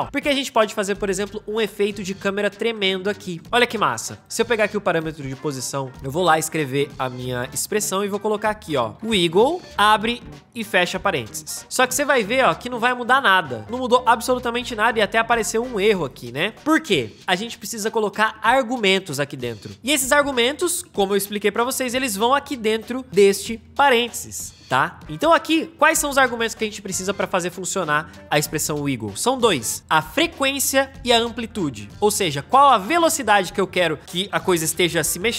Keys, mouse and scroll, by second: 5.1 p, 6.5 alt+scroll, 8.7-10.4 typing, 12.9 space.